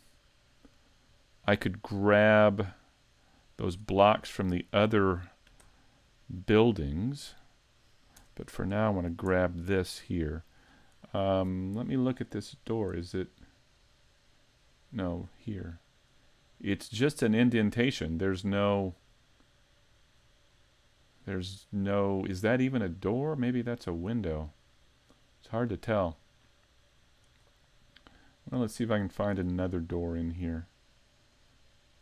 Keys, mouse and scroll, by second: 1.9 middle click, 3.5 middle click, 4.8 middle click, 6.1 shift+middle click, 6.3 shift+middle click, 7.0 right click, 7.5 middle click, 8.2 Tab, 8.5 scroll up 1, 8.7 right click, 9.4 shift+middle click, 9.8-10.2 scroll up 3, 10.3 shift+middle click, 12.6-13.0 scroll up 2, 13.0 middle click, 13.4 scroll up 1, 14.2-15.2 scroll down 3, 15.2 scroll down 2, 15.6 middle click, 16.1 scroll up 2, 16.5 middle click, 19.1 scroll down 3, 20.2-22.4 scroll up 1, 22.4 scroll up 1, 22.5 middle click, 23.6-24.6 scroll down 4, 24.6 middle click, 27.4 scroll up 4, 28.5-30.0 scroll up 4, 28.9 middle click, 30.0 middle click, 30.9-31.5 scroll up 1, 31.5 middle click, 31.5 scroll up 1.